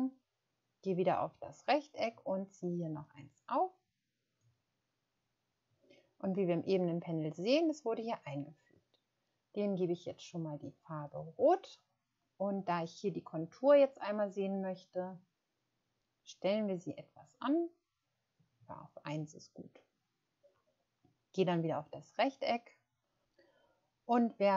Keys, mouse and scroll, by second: 14.8 scroll up 1, 16.6 scroll up 1, 17.7 scroll up 1, 17.9 scroll down 1, 19.0-19.5 scroll down 1.